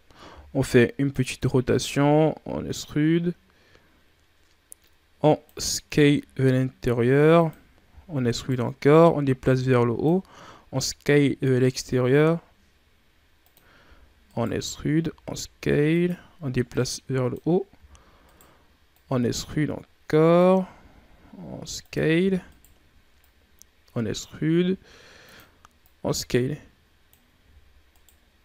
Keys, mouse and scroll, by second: 0.2 r, 1.8-4.9 drag, 5.8 s, 7.8 e, 8.9-10.9 drag, 10.9 s, 13.7 e, 14.9 s, 16.6-17.7 drag, 17.7 e, 18.8-20.6 drag, 20.6 s, 22.1 e, 23.1-24.4 drag, 24.4 s, 25.7-27.3 drag, 27.3 e.